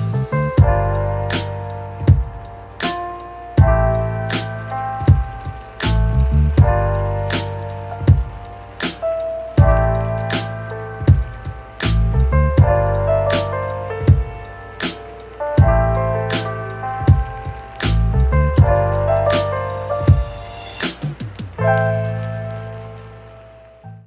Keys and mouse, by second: 0.1 middle click, 0.5 click, 0.5 f, 0.7 f, 1.1 ctrl+shift+z, 1.1 f, 1.3 middle click, 1.9 middle click, 2.2 middle click, 2.6 middle click, 3.0 shift+middle click, 3.5 KP_Divide, 3.8 ctrl+r, 3.8 right click, 4.1 middle click, 4.3-6.1 typing, 4.5 middle click, 5.1 shift+click, 5.3 middle click, 6.0 shift+click, 6.1 middle click, 6.2 Tab, 6.5 click, 6.7 ctrl+shift+s, 6.7 shift+middle click, 7.1 ctrl+a, 7.3 click, 7.7 click, 8.5 middle click, 10.9-13.0 middle drag, 10.9 x, 23.8 middle click.